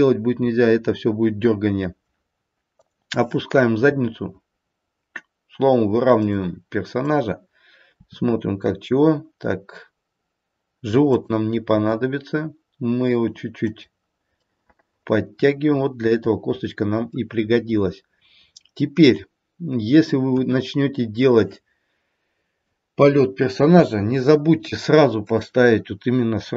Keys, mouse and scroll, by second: 2.8 click, 3.8 r, 6.8 click, 8.0 r, 11.7 g, 14.4 middle click, 20.3 KP_1, 23.8 KP_3, 25.2 click.